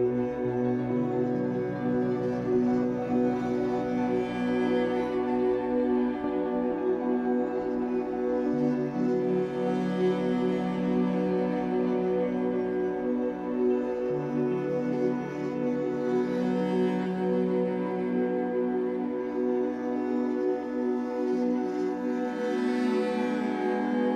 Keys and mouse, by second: 0.1 shift+click, 0.9 click, 1.2 typing, 2.4-3.1 typing, 2.6 click, 4.3-5.1 typing, 4.8 click, 7.9-8.7 typing, 8.2 click, 10.4-10.9 typing, 11.2 click, 11.8 click, 12.1 typing, 13.9-14.8 typing, 14.3 click, 16.6-17.3 typing, 17.6 click, 18.6-20.9 drag, 20.9 middle click, 22.0 alt+g.